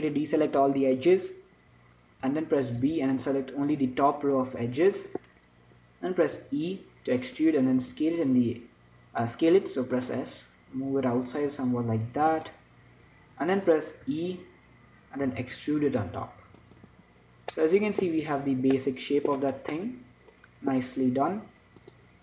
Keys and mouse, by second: 0.1 a, 3.1 b, 7.1 e, 8.1 s, 14.3 e, 17.2 Tab, 18.3 z, 19.1 click.